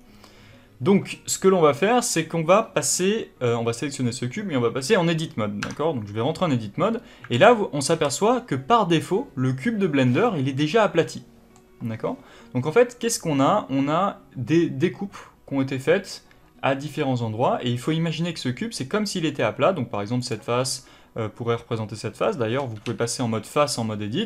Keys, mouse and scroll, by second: 2.9 middle click, 5.6 Tab, 6.8-7.2 scroll up 1, 7.2 alt+a, 10.1-20.1 middle drag, 20.1 click, 22.5 2, 22.7 3.